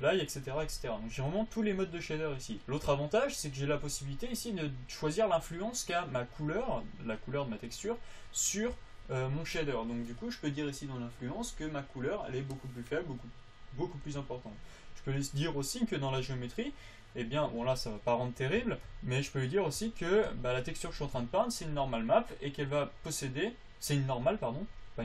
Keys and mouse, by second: 11.6-13.4 drag, 14.7-18.2 drag, 22.4-25.0 drag.